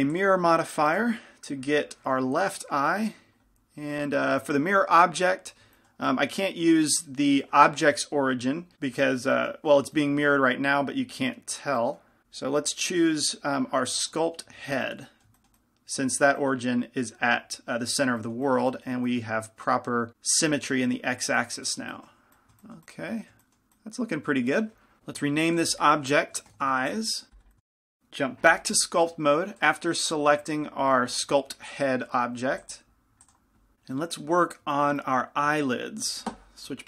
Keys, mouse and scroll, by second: 5.9-14.2 middle drag, 9.9 z, 14.2 click, 14.7 z, 15.0-24.1 middle drag, 27.0 click, 29.8-34.1 drag.